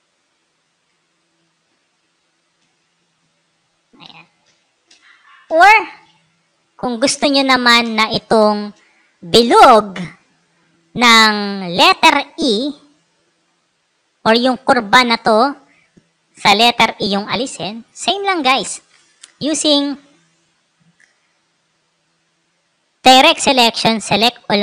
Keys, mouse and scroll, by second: 0.9 ctrl+z, 1.6 ctrl+alt+z, 2.1 ctrl+alt+z, 2.5 ctrl+alt+z, 3.9 ctrl+alt+z, 4.3 ctrl+alt+z, 4.8 ctrl+alt+z, 5.4 ctrl+alt+z, 6.3 click, 7.7 space, 7.9 click, 18.1 right click, 19.0 click, 22.9-24.1 drag.